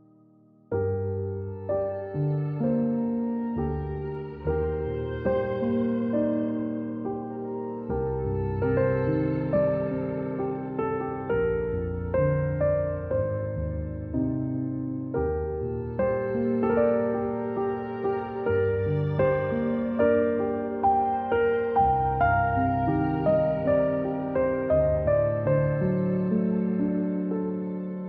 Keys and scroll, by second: 2.8 v, 3.3-3.9 space, 4.3 z, 5.1 a, 6.9-12.0 typing, 13.3 v, 14.6 p.